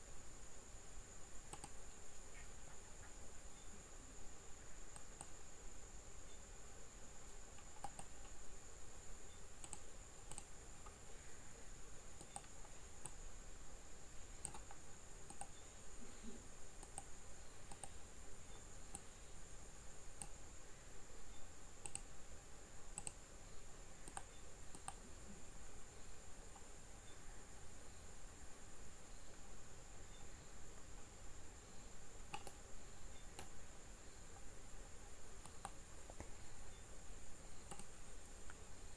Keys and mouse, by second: 13.1 middle click, 18.9 middle click.